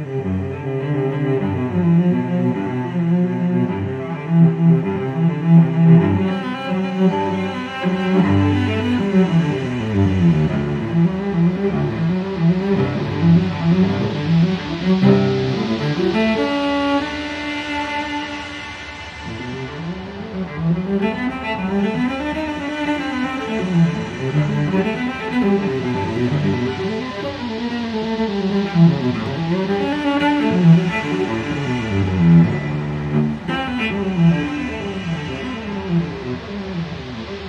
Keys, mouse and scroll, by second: 1.0 click, 2.1 click, 3.4 click, 4.1 click, 5.0 click, 6.0 ctrl+click, 8.7 click, 11.6 click, 13.6-14.0 scroll down 2, 14.1-14.6 scroll up 2, 14.9 scroll down 2, 16.8 click, 19.0 click, 20.6 click, 22.1 click, 24.5 click, 25.9 click, 27.0 click, 27.8 click, 28.6 click, 29.6 0, 30.5 click, 31.4 click, 32.9 click, 33.9 click, 35.8 click.